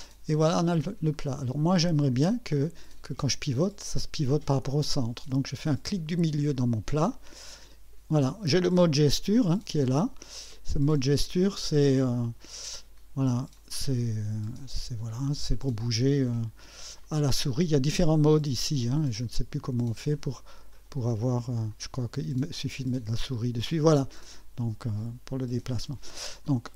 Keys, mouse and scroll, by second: 1.1 right click, 6.1 middle click, 7.1-8.3 drag, 10.5 click, 11.6 click, 12.7 right click, 13.6 click, 17.0 click, 18.3 click, 19.2 click, 20.1 click, 20.5 right click, 21.7 click, 26.4 click.